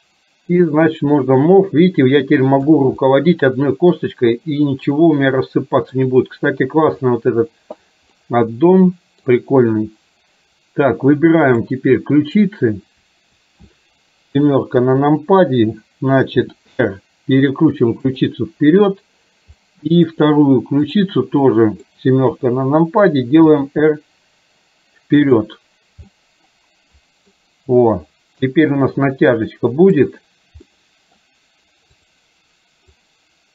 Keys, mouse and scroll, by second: 0.8-2.9 drag, 3.1-4.0 middle drag, 5.1 scroll up 1, 5.3-6.1 middle drag, 8.4-9.3 middle drag, 9.3 scroll down 1, 11.5 click, 14.5 KP_7, 16.5 r, 19.8-20.1 middle drag, 21.0 click, 21.5-21.9 middle drag, 22.4 KP_7, 23.6 r, 26.1-27.4 middle drag, 30.1 click, 30.8-31.3 middle drag, 32.0 click, 33.0-33.5 drag.